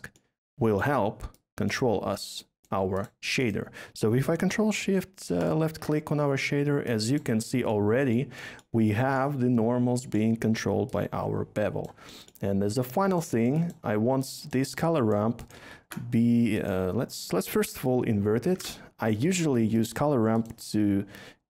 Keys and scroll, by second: 15.7 a, 17.6-18.5 typing.